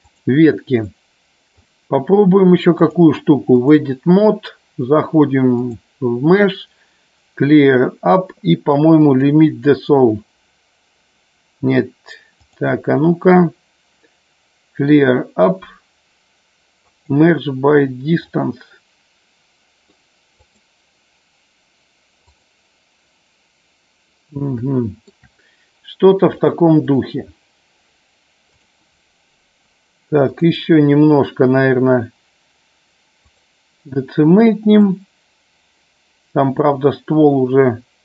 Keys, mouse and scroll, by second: 0.9 middle click, 2.8-3.8 drag, 5.6 click, 12.3 click, 18.2-19.9 middle drag, 20.3 click, 22.3 click, 24.5 shift+middle click, 26.4-27.1 drag, 28.5 click, 30.3-33.4 drag, 35.2-38.0 drag.